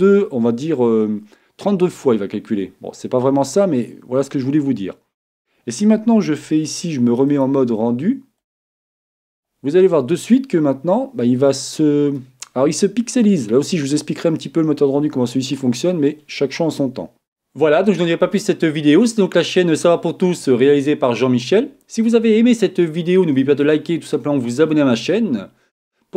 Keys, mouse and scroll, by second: 4.4-7.0 middle drag, 7.4-9.3 drag, 16.0-26.1 middle drag.